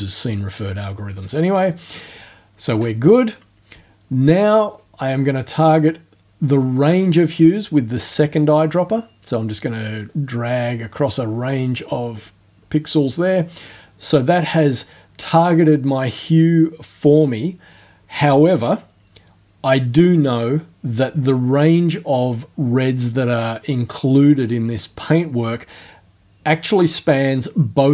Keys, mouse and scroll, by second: 2.1 click, 4.7 click, 8.7 click, 10.1-12.3 drag.